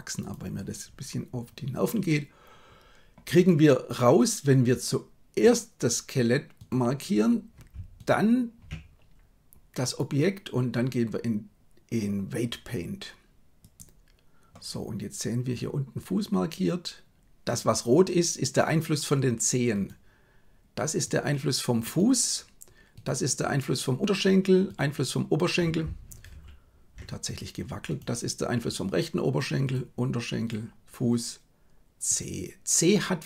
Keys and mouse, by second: 9.7-13.8 drag, 26.4 ctrl+z, 30.4 right click.